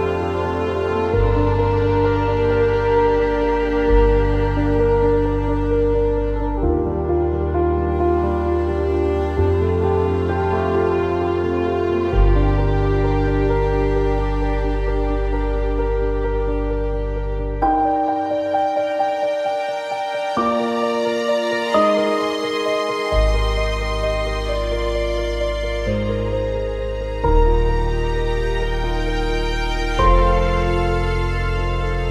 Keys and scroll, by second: 3.3 alt+x, 15.2 x, 15.9 z, 19.4 alt+x.